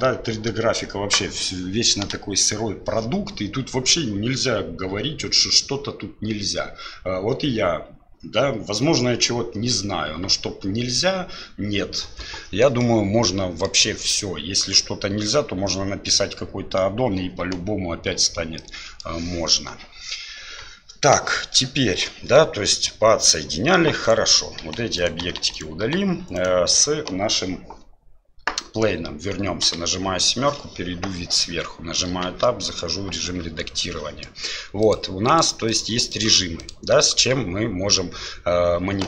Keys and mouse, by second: 12.8-13.7 middle drag, 18.6 middle click, 22.7-23.8 middle drag, 24.6 Delete, 26.4 click, 29.6 KP_7, 32.1 Tab, 34.9 click, 35.7 click, 36.1 click.